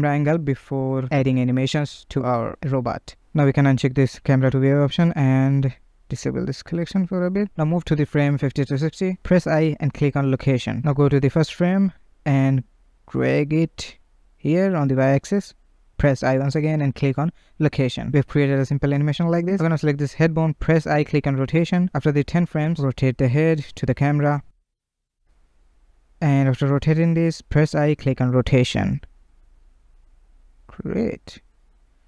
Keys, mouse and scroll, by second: 0.1-2.9 shift+middle drag, 2.9 click, 3.5 n, 5.3 click, 6.0-9.0 drag, 10.9 shift+Left, 12.0 g, 17.7-20.0 drag, 20.0 i, 22.3-23.5 drag, 23.5 r, 25.0 r, 26.8 i, 28.9-32.0 drag.